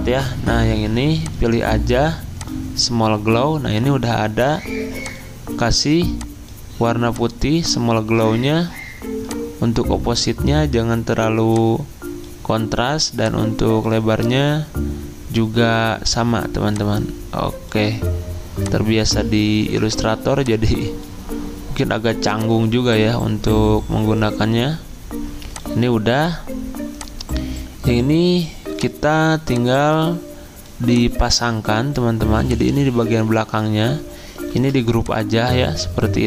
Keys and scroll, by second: 34.5 ctrl+g.